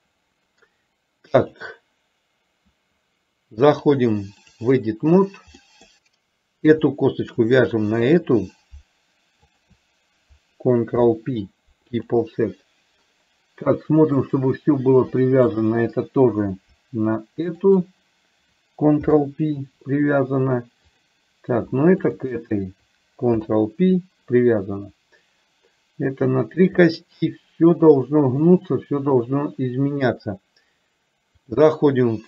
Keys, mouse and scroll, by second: 3.9 click, 5.7 middle click, 7.4 shift+click, 9.6 shift+click, 11.0 ctrl+p, 17.7 shift+click, 19.1 ctrl+p, 21.0 click, 22.1 shift+click, 23.5 ctrl+p, 27.0-28.6 middle drag, 31.5-32.2 drag.